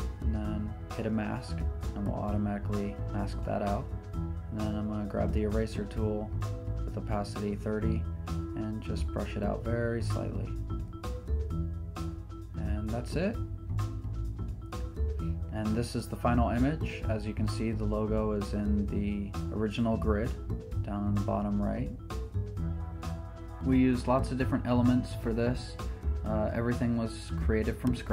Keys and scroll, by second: 9.3 e.